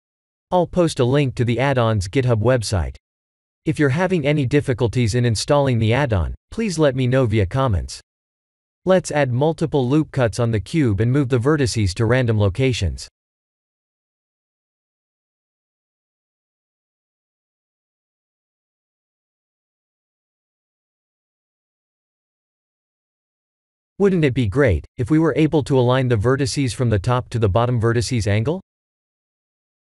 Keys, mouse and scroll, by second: 3.1 Tab, 3.9 shift+middle click, 5.2 ctrl+r, 8.2 click, 8.9 shift+z, 9.2 click, 9.4 1, 9.7 click, 10.2 b, 11.7 g, 13.3 click, 13.6 b, 14.1 g, 15.0 click, 15.1 b, 15.7 g, 17.3 click, 17.5 b, 18.0 g, 18.8 click, 19.0 b, 19.6 g, 20.6 click, 20.8 b, 21.4 g, 24.1 click, 25.6 click, 27.0 click, 27.2 b, 28.3 b.